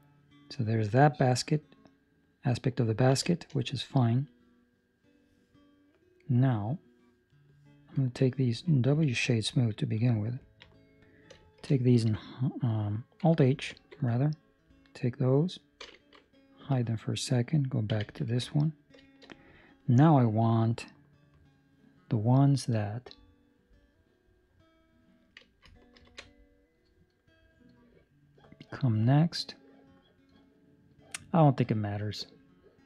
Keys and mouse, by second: 3.0 ctrl+middle click, 3.2 shift+middle click, 3.5 middle click, 6.2 middle click, 7.2 right click, 7.9 ctrl+middle click, 8.8 w, 10.4 ctrl+middle click, 10.6 middle click, 11.5 shift+middle click, 17.8 Tab, 17.8 right click, 17.8 h, 18.3 ctrl+middle click, 18.4 middle click, 19.0 shift+middle click, 19.3 middle click, 19.9 middle click, 20.2 shift+middle click.